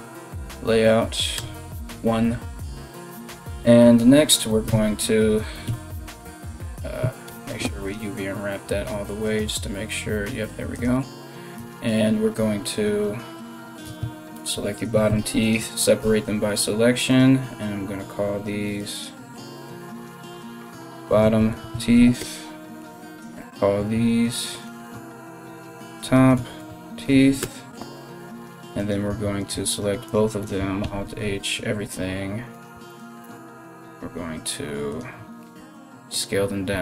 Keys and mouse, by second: 0.0 Tab, 0.0 click, 0.0-8.9 middle drag, 1.0 KP_1, 4.3 Tab, 5.3 p, 6.3 a, 6.9 u, 10.4 click, 10.4-25.2 middle drag, 11.2 Tab, 13.5 a, 13.6 a, 14.0 l, 14.7 p, 15.6 Tab, 16.7 right click, 18.6-24.4 drag, 20.4 t, 21.4 e, 23.0 right click, 24.4-34.6 shift+drag, 26.4 e, 28.4 right click, 29.0 right click, 29.3 right click, 29.7 shift+right click, 30.6 alt+h, 32.1 right click, 32.5 shift+right click, 33.2 s, 34.6-36.8 middle drag, 35.2 s, 36.3 s.